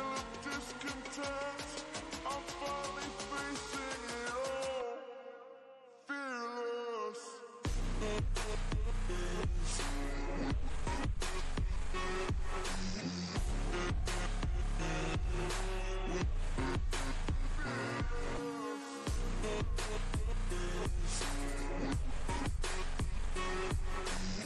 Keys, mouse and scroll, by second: 0.4 ctrl+space, 0.7-1.3 ctrl+click, 0.9 ctrl+space, 1.5 click, 2.7-3.2 shift+drag, 6.0 right click, 6.5 click, 6.9-11.0 shift+drag, 12.8 click, 13.6-15.8 drag, 16.2 ctrl+space, 16.6 ctrl+click, 16.6 ctrl+space, 17.8-18.5 click, 19.0 ctrl+click, 19.2 ctrl+space, 19.5-20.0 click, 21.4-24.4 alt+drag.